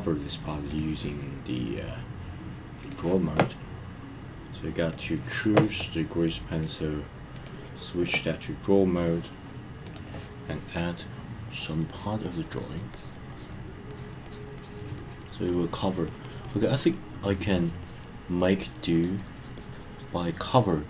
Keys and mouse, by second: 0.7-2.9 drag, 4.9 click, 6.5-7.5 drag, 9.9 click, 11.6 click, 12.0 click, 12.3 click, 12.6 click, 12.9 click, 13.3 click, 13.9 click, 14.3 click, 14.6 click, 14.9 click, 15.1 click, 15.5 click, 15.7 click, 16.2 click, 16.4 click, 16.6 click, 17.3 click, 17.4 click, 17.6 click, 17.8 click, 18.4 click, 18.6 click, 18.8 click, 19.0 click, 19.4 click, 19.6 click, 19.7 click, 19.9 click.